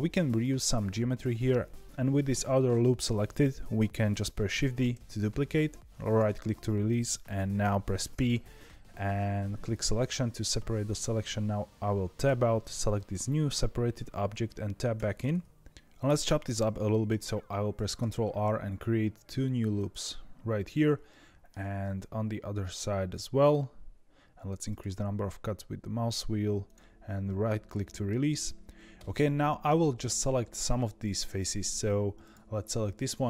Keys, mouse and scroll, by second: 4.9 shift+d, 8.1 p, 12.2 Tab, 12.9 click, 17.9 ctrl+r, 21.0 middle click, 21.8 ctrl+r, 27.2-28.9 middle drag, 28.9 3, 29.2-32.1 middle drag, 32.1 click.